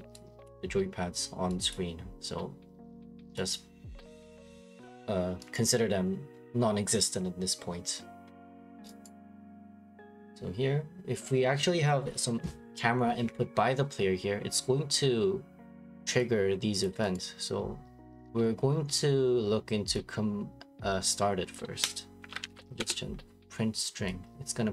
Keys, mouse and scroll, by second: 4.4 click, 5.1 middle click, 5.5 middle click, 5.5 right click, 6.3 middle click, 6.4 middle click, 7.2 scroll, 9.0 right click, 9.7 right click, 16.8 click, 17.1 right click, 18.9 scroll, 21.5 click, 22.2-22.8 typing, 22.8 Return.